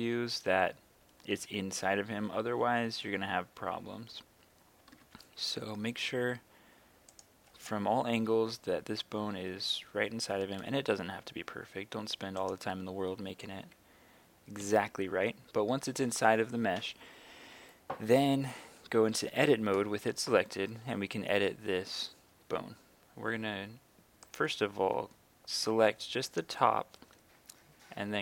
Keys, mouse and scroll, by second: 0.0 KP_3, 2.5 g, 5.0 y, 7.2 click, 11.6 g, 12.4 click, 13.5 KP_3, 14.6 KP_1, 19.4 Tab, 24.2 right click, 28.0 g.